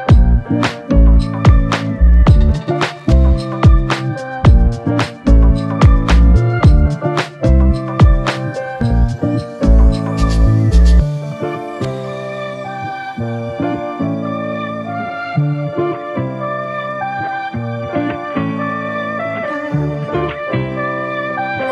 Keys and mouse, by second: 0.5 f, 2.0 double click, 10.3 double click, 15.3 f, 20.7 ctrl+i.